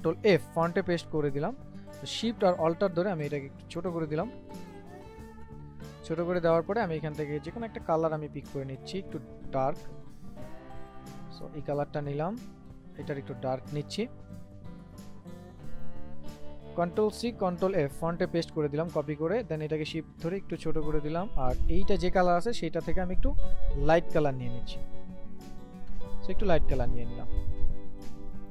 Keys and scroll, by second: 0.4 ctrl+f, 17.1 ctrl+c, 17.6 ctrl+f.